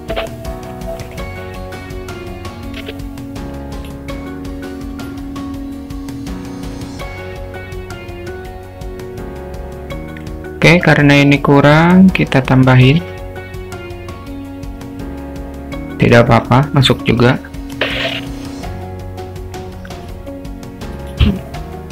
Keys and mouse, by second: 1.9 click, 2.8 r, 4.7-6.7 drag, 8.4 click, 9.2-10.3 drag, 13.0 e, 17.7 Tab, 20.0 s.